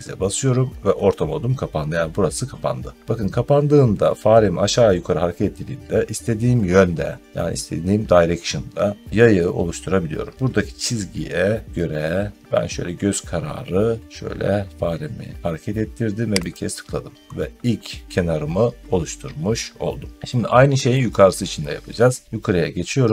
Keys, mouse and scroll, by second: 10.2 middle click, 10.3 middle click, 16.4 click, 17.2 middle click, 17.3 middle click, 22.1 middle click.